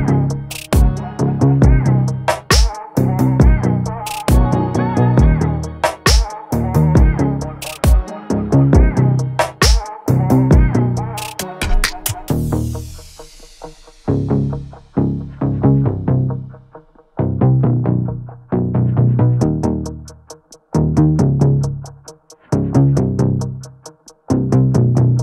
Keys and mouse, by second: 0.2-0.8 drag, 2.9-3.9 drag, 4.9 middle click, 9.1-11.2 drag, 17.6 click, 19.9-24.2 drag.